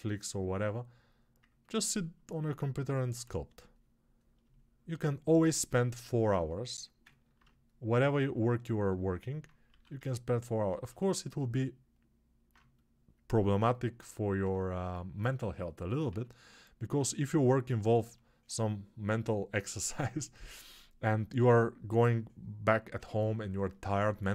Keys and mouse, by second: 3.0 1, 7.2-16.0 alt+shift+drag, 9.6 1, 16.0 1.